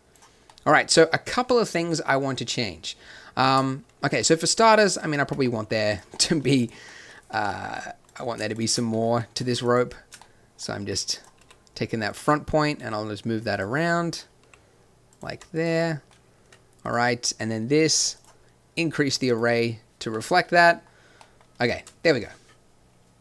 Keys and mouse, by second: 3.6 shift+z, 5.2 Tab, 8.5 middle click, 9.9 click, 10.8 r, 11.3 g, 13.8 g, 14.4 r, 15.3 g, 16.4 Tab, 20.1-21.2 middle drag, 22.0 shift+z.